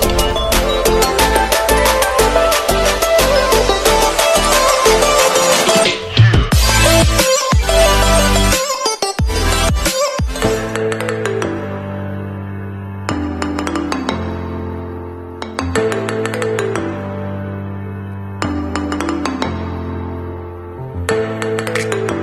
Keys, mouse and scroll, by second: 1.5 ctrl+z, 2.0 z, 3.3 alt+scroll down 1, 4.7-5.4 scroll down 1, 5.6 alt+scroll up 1, 6.3-7.9 alt+scroll down 1, 7.9 click, 14.4 shift+h, 14.7 a, 15.0 p, 15.5 y, 16.5 Escape, 17.5 v, 18.1 click.